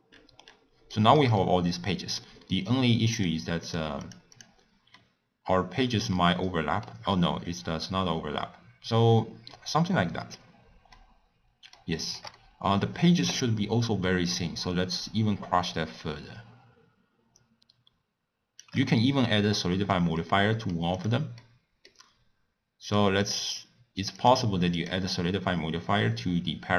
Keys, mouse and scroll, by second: 0.0-0.4 scroll up 1, 0.4 scroll down 1, 0.6 scroll up 3, 1.0-3.2 shift+middle drag, 3.2 click, 5.0-10.2 middle drag, 11.0-14.8 middle drag, 14.8-17.5 shift+drag, 19.2-21.0 middle drag, 21.0 click, 21.3-22.8 middle drag, 22.8-23.3 drag.